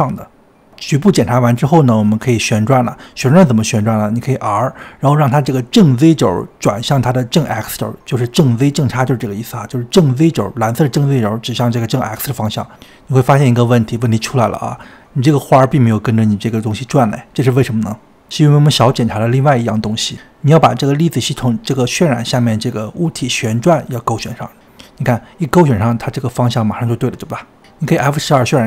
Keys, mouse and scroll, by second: 0.1 r, 5.2 r, 11.8-12.6 scroll down 3, 12.6-13.1 scroll down 1, 13.1 click, 13.5-14.4 scroll up 4, 15.0-19.1 middle drag, 19.1 click, 19.3 click, 24.7 click, 25.7 scroll up 3, 26.3-27.8 shift+middle drag, 27.8 click.